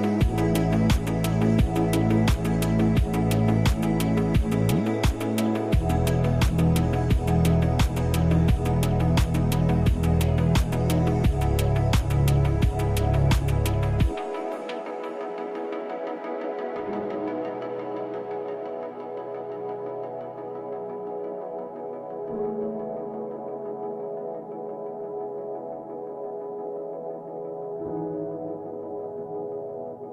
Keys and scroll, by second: 0.2 space, 11.2 space, 13.7 ctrl+z, 18.6 space, 23.8 space, 25.6 space.